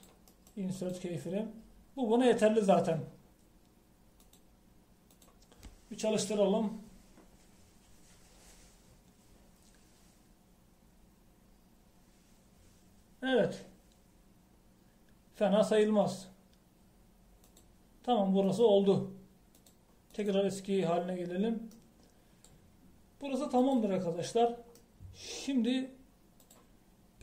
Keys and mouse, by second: 18.6-21.6 drag.